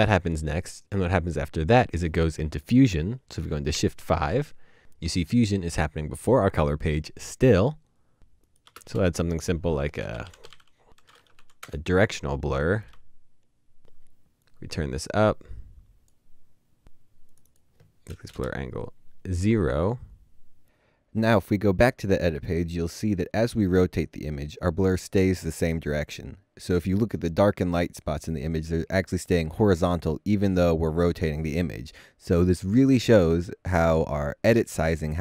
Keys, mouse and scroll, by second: 3.3 double click, 4.5 typing, 8.7-11.1 typing, 12.1 Return, 18.3 0, 18.3 Return, 18.4 0, 21.4 Return, 22.5 typing.